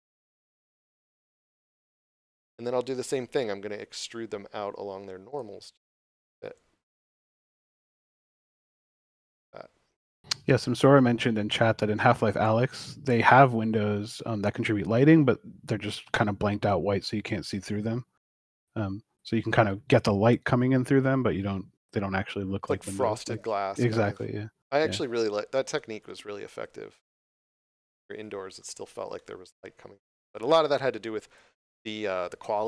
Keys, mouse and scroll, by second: 1.9 middle click, 5.2 click, 15.1 x, 15.8 click, 16.4 middle click, 17.8 scroll up 1, 18.4 middle click, 22.4 shift+middle click, 24.0 middle click, 25.6 shift+middle click, 27.3 middle click, 30.2 shift+middle click.